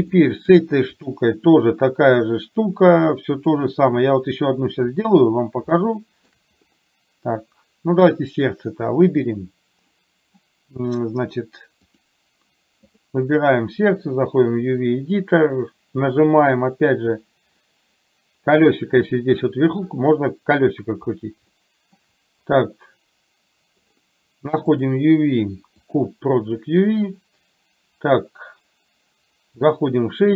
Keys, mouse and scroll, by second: 0.1 shift+middle click, 1.0 click, 12.9 click.